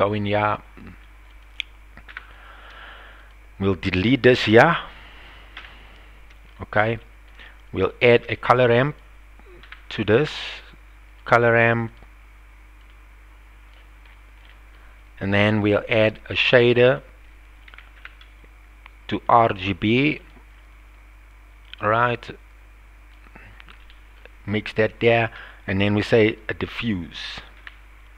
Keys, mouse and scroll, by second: 2.1 n, 3.2 click, 4.5 drag, 5.6 x, 7.0 shift+middle click, 8.1 shift+a, 12.9-13.8 drag, 14.4 middle click, 16.3 shift+a, 21.6-23.1 drag, 23.8 middle click, 25.2 shift+a.